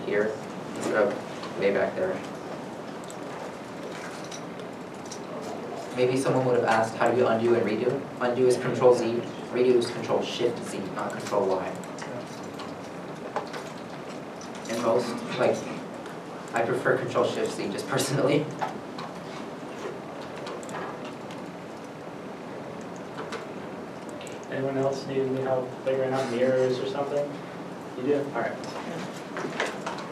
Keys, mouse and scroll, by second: 0.4 ctrl+z, 0.6 ctrl+z, 2.3 ctrl+s, 4.2 ctrl+shift+z, 7.6 shift+click, 13.3 shift+click, 14.2 shift+middle click, 14.8 middle click, 18.4 shift+middle click, 20.1 3, 20.4 2, 21.2 shift+click, 25.6 shift+click, 27.2 shift+click.